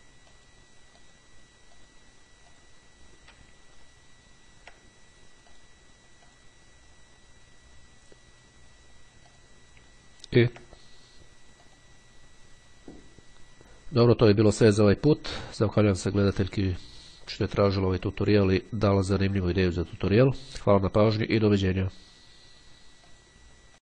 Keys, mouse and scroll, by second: 0.5 click, 1.2-2.5 drag, 2.7 click, 3.9-4.5 ctrl+scroll up 2, 5.5 click, 6.5 click, 9.3 click, 10.3-10.8 ctrl+scroll down 2, 11.3 scroll up 2, 11.8 click.